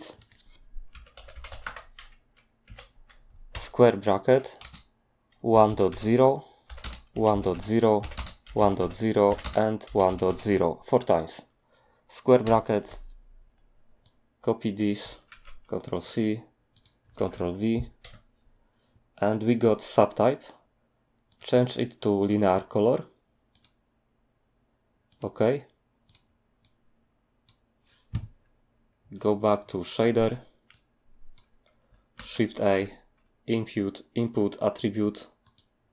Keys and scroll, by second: 0.9-1.6 typing, 2.6 Tab, 3.3-10.3 typing, 12.4 ], 15.3 ctrl+c, 17.2 ctrl+v, 18.0 Return, 32.2 a.